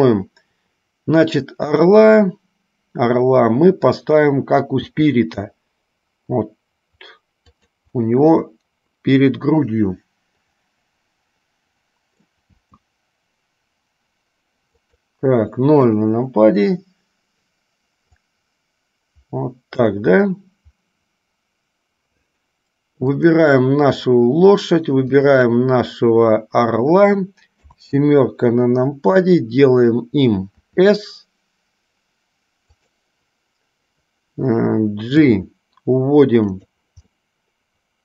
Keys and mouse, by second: 1.8 click, 8.3-12.5 middle drag, 18.3-20.2 drag, 23.3 click, 25.3 shift+click, 36.8 g, 37.3-38.0 middle drag.